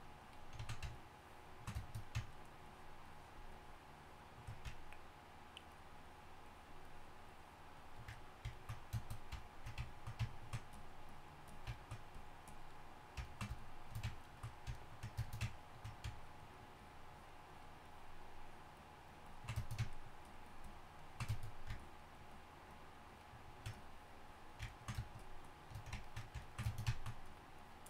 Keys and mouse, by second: 5.1-15.5 drag.